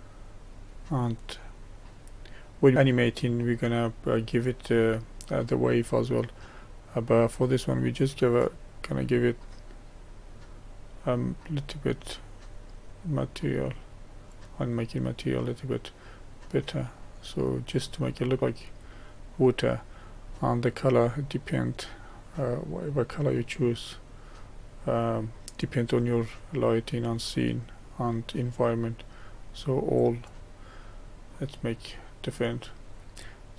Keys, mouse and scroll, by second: 8.6-14.7 drag, 14.7-18.6 middle drag, 22.4 click, 30.9-33.5 middle drag.